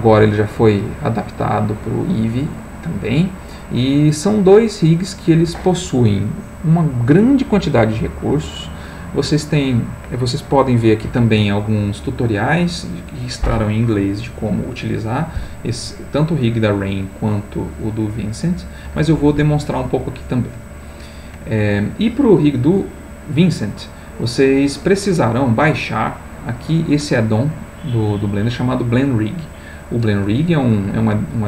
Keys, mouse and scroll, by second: 2.5-3.1 scroll down 1, 4.6-5.3 scroll down 2, 5.8-6.5 scroll down 1, 7.2-7.6 scroll down 2, 8.0-8.5 scroll down 2, 15.8 click, 17.3 click, 20.6 click, 23.3 click.